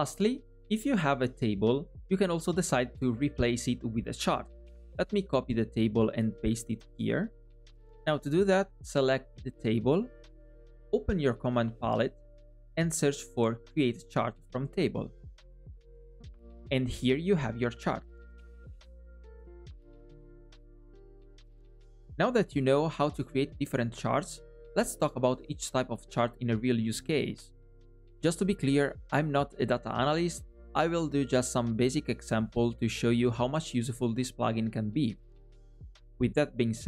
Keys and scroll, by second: 6.8 super+c, 8.0 super+v, 12.8 super+p.